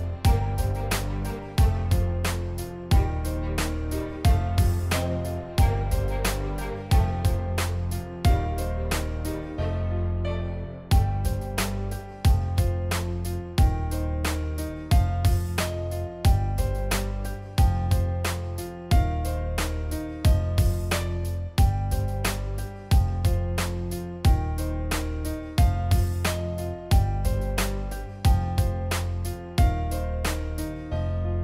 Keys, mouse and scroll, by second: 0.3 click, 2.0-3.5 drag, 3.9 click, 4.8 click, 5.7 click, 7.2 click, 8.3 click, 8.8 z, 9.0 click, 9.5 click, 10.5 ctrl+z, 11.1 click, 12.6 click, 13.6-14.8 scroll down 1, 15.4-18.1 drag, 19.1-19.6 scroll down 1, 19.6-20.7 drag, 21.1-21.7 scroll up 2, 21.7-24.3 drag, 24.6 ctrl+z, 24.9-27.2 drag, 27.6-28.7 drag, 29.1-30.5 drag, 30.9-31.4 drag.